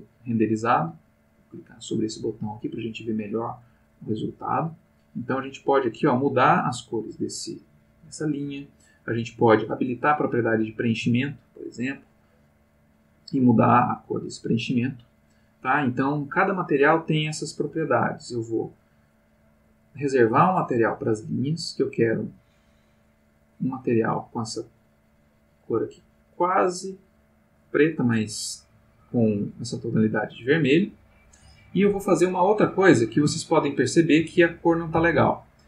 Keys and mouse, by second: 2.9 click, 4.2-5.1 drag, 5.2-7.4 drag, 10.0 click, 11.7 click, 12.8-13.5 drag, 13.7-14.5 drag, 18.7 click, 22.8 click, 23.9-27.9 drag, 28.6-30.5 drag, 33.4 ctrl+middle click, 35.1 ctrl+middle click.